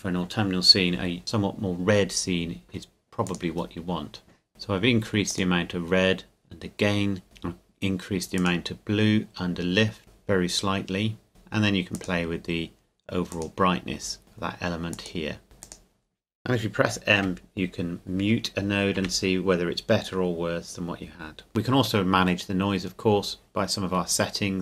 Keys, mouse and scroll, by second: 3.2 click, 5.3 click, 8.4 click, 11.3 click, 12.0 click, 14.9 click, 15.6 click, 17.2 m, 24.0-24.6 scroll up 1.